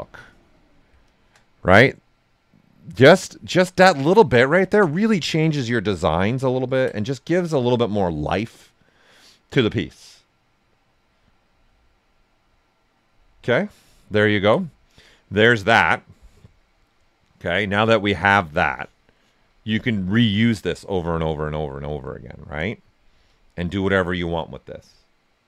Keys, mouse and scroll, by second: 1.0-4.5 shift+drag, 3.5 typing, 4.5 ctrl+right click, 5.6 click, 6.4 ctrl+right click, 6.9 right click, 7.3 alt+right click, 14.1-22.0 ctrl+right drag, 21.7-22.5 typing, 22.0 click.